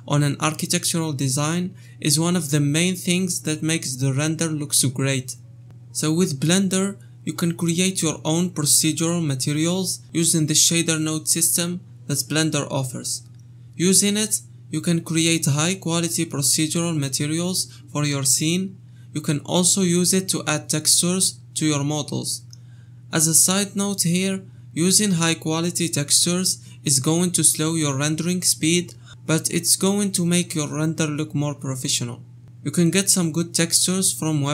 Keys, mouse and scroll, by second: 13.3 click, 13.6 KP_Decimal, 13.8-14.4 scroll up 3, 14.0 shift+middle click, 14.6-16.6 drag, 17.2 click, 17.5 click, 19.4-20.4 middle drag, 20.4 scroll up 2, 20.6 click, 20.9 scroll down 2, 21.0 Tab, 21.2 click, 21.4 middle click, 22.2 click, 22.4 scroll down 1, 22.7 ctrl+click, 23.6 scroll down 2, 23.8 shift+middle click, 24.0 scroll up 2, 24.2 ctrl+Left, 24.4 ctrl+z, 26.0-27.5 drag, 27.7 click, 27.8 Tab, 28.0 scroll down 2, 28.2-28.6 scroll up 5, 28.8 Tab, 29.5 u, 29.7 Tab, 29.9 middle click, 30.3 scroll down 3, 30.5 shift+middle click, 31.3 KP_0, 31.7 click, 32.1-33.9 shift+middle drag, 33.9 click.